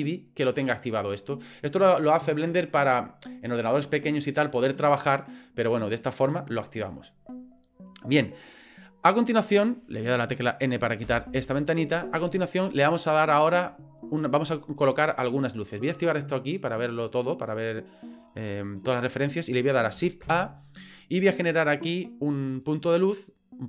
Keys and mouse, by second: 0.2 click, 0.5 click, 11.0 n, 12.1-13.2 middle drag, 13.8-14.1 shift+drag, 16.4 click, 18.5 middle click, 20.2 shift+a.